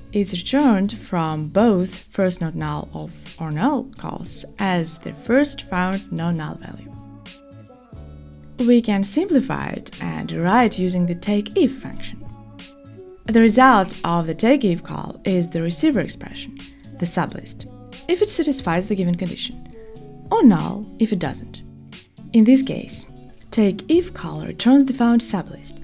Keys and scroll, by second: 1.0 Escape, 16.2 Return.